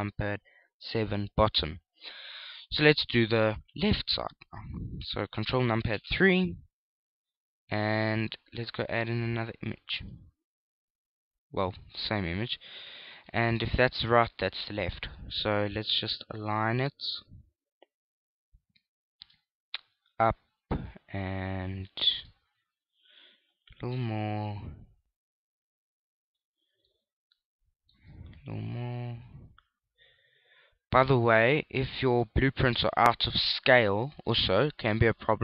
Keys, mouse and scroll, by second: 0.0-0.1 typing, 4.6 ctrl+KP_3, 6.5 ctrl+KP_3, 9.7 click, 14.1 shift+middle click, 15.8 shift+middle click, 17.0 click, 21.1 click, 27.7 shift+middle click, 30.1 click, 34.2 middle click.